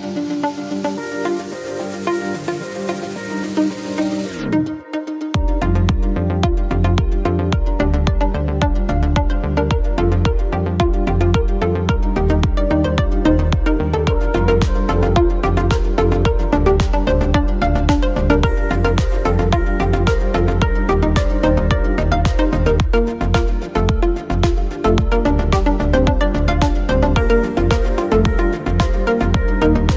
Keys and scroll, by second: 0.0-4.2 typing, 5.7 ctrl+t, 15.4 ctrl+t, 18.0 ctrl+z.